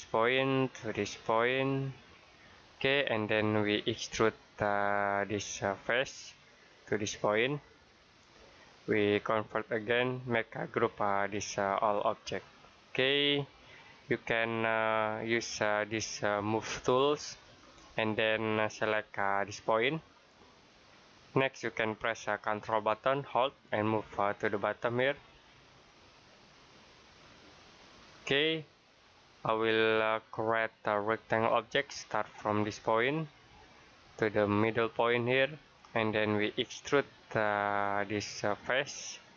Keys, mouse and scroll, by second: 5.0 click, 11.5 right click, 12.9 click, 13.5 middle click, 17.2 click, 20.9 click, 27.8 ctrl+click, 28.3 middle click, 31.3 click, 37.8 click.